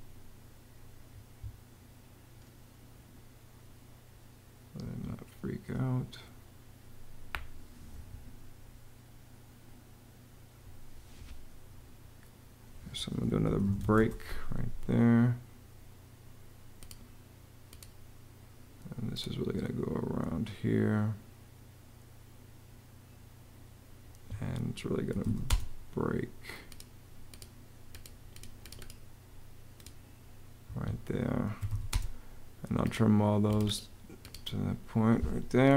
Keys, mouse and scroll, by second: 0.9 Escape, 4.8 Escape, 13.3 b, 13.6 k, 13.8 Return, 23.9 Escape, 25.1 r, 25.3 space, 30.5 Escape, 31.2-32.0 typing.